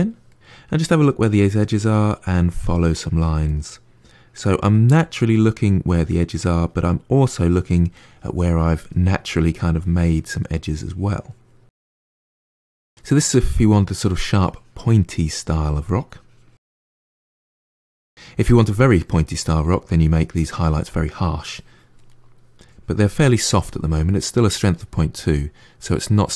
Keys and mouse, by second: 0.9 click, 1.3 middle click, 1.6 click, 1.8 middle click, 2.1 click, 2.5-4.1 middle drag, 4.1 click, 4.4 middle click, 4.7 click, 5.3 middle click, 5.5-6.6 drag, 6.6 middle click, 7.3-9.0 drag, 9.0 middle click, 9.3 click, 9.6-10.7 middle drag, 10.7 click, 11.1 middle click, 11.4 click, 11.8 middle click, 12.1 click, 12.3 middle click, 12.9 click, 13.3 middle click, 13.7 click, 14.2-16.1 middle drag, 16.1 click, 16.4 middle click, 16.6 click, 17.2-21.3 middle drag, 21.3 click, 21.9 middle click, 22.5 click, 23.1-26.3 middle drag.